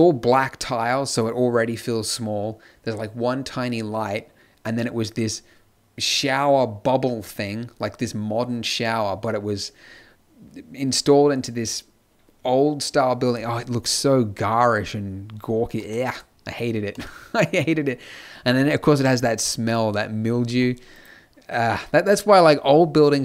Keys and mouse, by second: 15.8-17.3 middle drag.